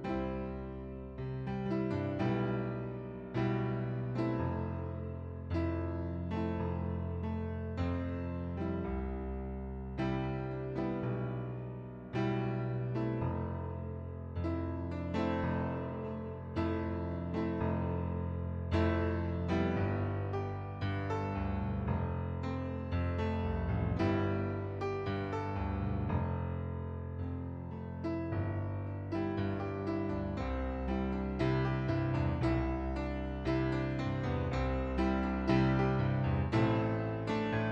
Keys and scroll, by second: 8.4-11.0 typing, 13.8-14.6 typing.